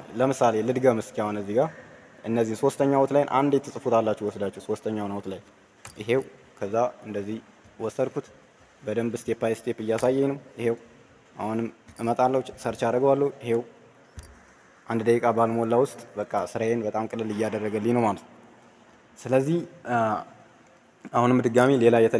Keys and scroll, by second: 5.7 ctrl+c, 9.8 ctrl+v.